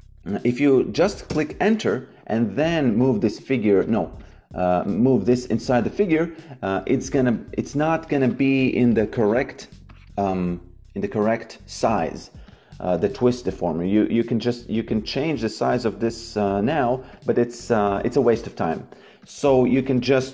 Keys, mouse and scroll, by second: 1.2 Return, 7.3 click, 12.4 click, 17.0 click, 18.6 Delete, 19.1 click, 19.9 shift+c, 20.2 w.